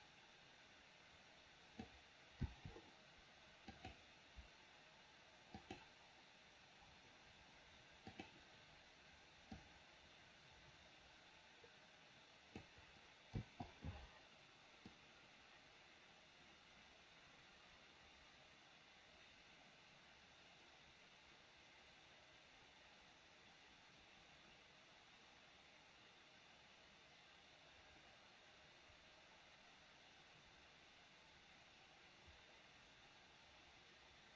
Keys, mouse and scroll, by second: 2.5 i, 3.8 click, 5.7 click, 8.2 click, 9.7-12.7 drag, 13.4 i, 15.0-34.3 drag.